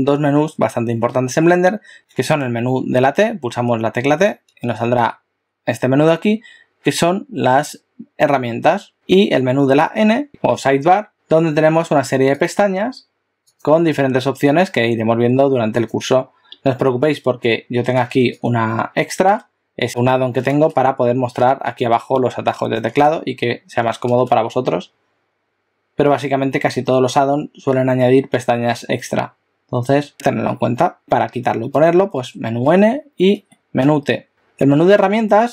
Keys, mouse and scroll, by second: 2.1 t, 3.1 t, 5.0 t, 9.9 n, 10.3 click, 12.4 click, 13.4 click, 31.0 click, 31.7 n, 32.2 n, 33.4 t, 33.9 t.